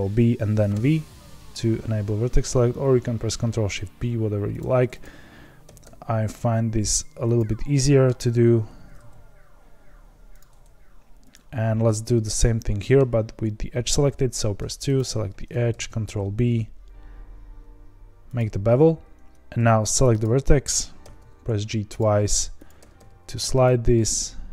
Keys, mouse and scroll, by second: 5.0 click, 5.6 g, 7.3 click, 7.7-8.7 middle drag, 8.7 ctrl+b, 11.3 click, 12.1-14.3 middle drag, 14.3 2, 14.9 click, 15.6 ctrl+b, 19.0 1, 19.3 ctrl+z, 20.2 click, 21.1 g, 22.6 click, 22.8 g, 23.9-24.5 middle drag.